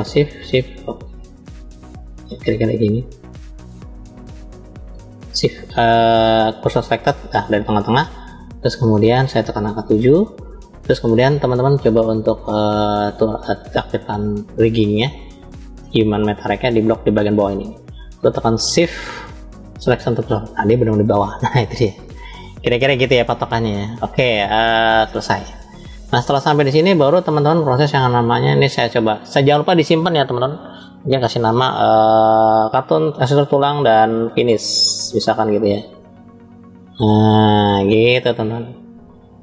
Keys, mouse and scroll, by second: 0.1 shift+click, 1.6 shift+click, 2.4 shift+click, 3.3 shift+click, 3.9 shift+click, 5.0 shift+s, 7.8-8.8 middle drag, 9.5 KP_1, 11.9-12.6 drag, 13.2 click, 14.5-15.3 drag, 16.0-17.3 drag, 18.5 shift+s, 24.0-24.7 drag, 25.2 scroll down 2, 26.3-26.9 middle drag, 26.3 scroll down 1, 27.5-28.1 shift+middle drag, 29.1-31.2 drag.